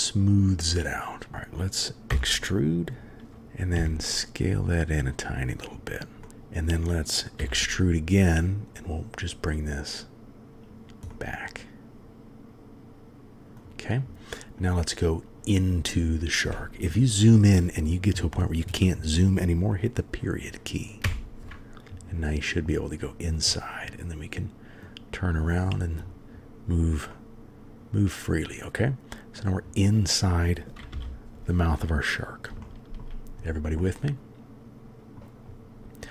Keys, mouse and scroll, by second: 2.1 e, 6.2-7.4 drag, 7.4 e, 11.1-13.6 drag, 13.6-14.7 middle drag, 15.7-21.0 middle drag, 21.0 KP_Decimal, 23.5-24.8 middle drag, 27.1-29.4 middle drag, 30.9 n, 32.6 shift+middle click, 33.8 click, 33.9-35.2 middle drag.